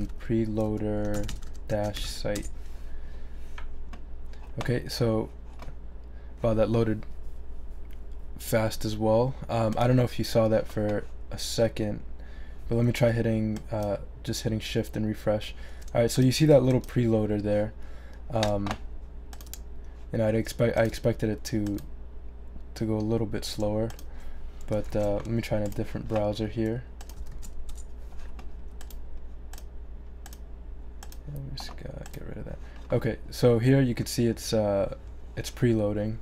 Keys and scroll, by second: 0.0-2.5 typing, 24.9 super+c, 27.3 super+v, 27.7 super+Return.